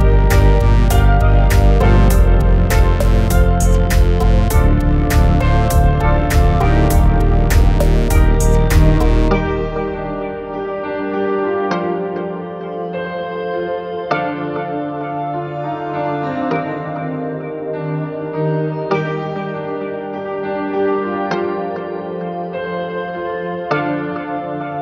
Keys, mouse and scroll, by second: 0.2 middle click, 3.1-4.9 drag, 6.9-7.7 middle drag, 9.7 click, 10.6 5.